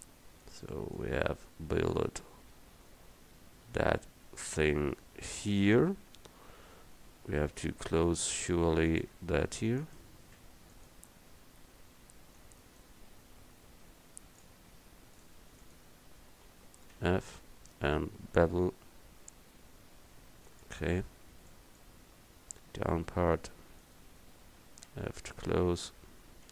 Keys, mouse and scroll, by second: 7.9 Tab, 8.6 Tab, 9.2 Tab, 10.4 Tab, 12.0 Tab, 17.0 f, 18.5 ctrl+b, 24.9 f.